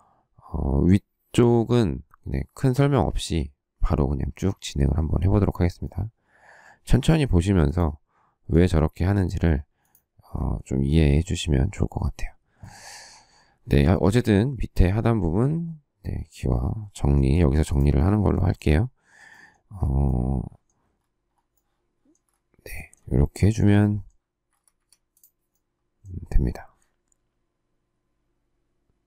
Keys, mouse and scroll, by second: 17.2 shift+middle click, 18.4 shift+middle click, 24.4 Escape, 24.7 Escape.